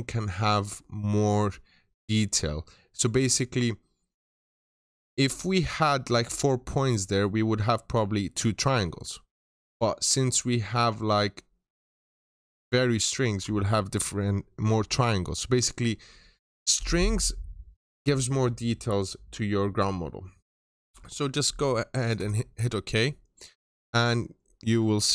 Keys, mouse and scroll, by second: 22.1 click.